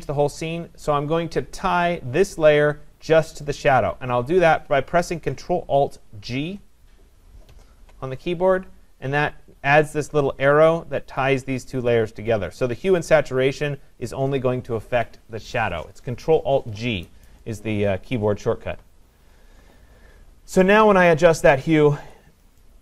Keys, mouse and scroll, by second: 6.3-12.6 drag, 7.5 ctrl+alt+g, 22.1 click.